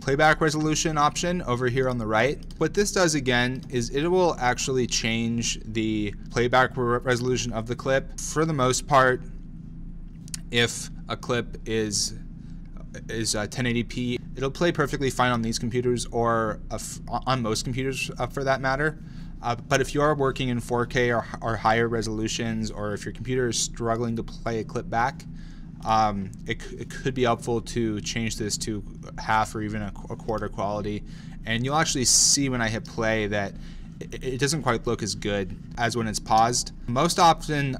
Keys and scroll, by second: 32.8 space, 35.7 space, 36.3 space.